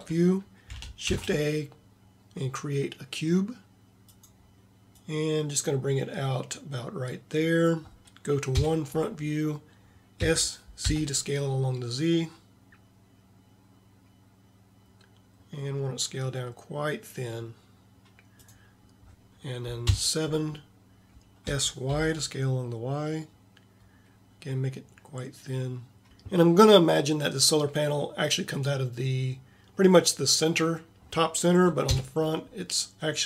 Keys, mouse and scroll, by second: 1.2 shift+a, 4.3 shift+a, 8.7 KP_1, 10.2 s, 20.0 KP_7, 21.5 s, 31.9 KP_1.